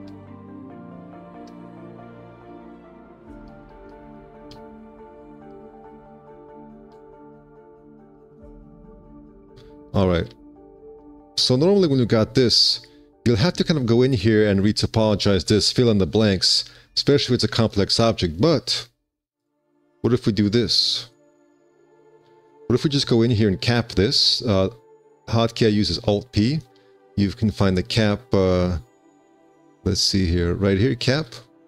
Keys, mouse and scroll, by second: 10.1 5, 10.3 q, 10.9 d, 12.6 5, 22.1 3, 26.5 alt+p, 27.8 ctrl+z.